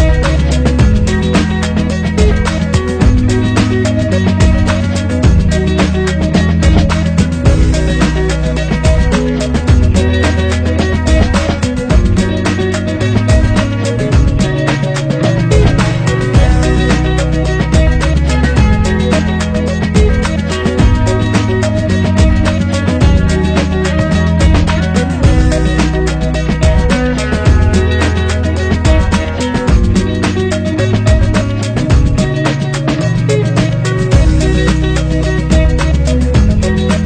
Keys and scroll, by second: 2.6 Delete.